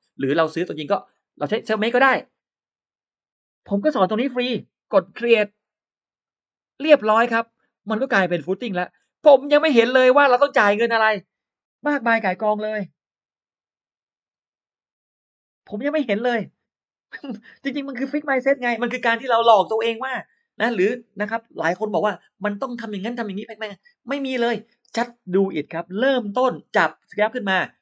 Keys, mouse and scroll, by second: 6.1 click, 6.6 click, 8.3 click, 8.8-9.1 scroll up 2, 9.4 click, 10.1 click, 10.5 click.